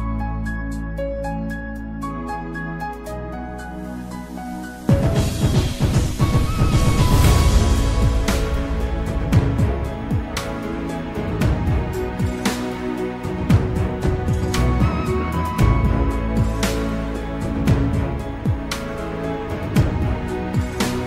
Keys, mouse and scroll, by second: 3.3 click, 4.5-5.8 scroll up 1, 6.0 ctrl+r, 18.8 g.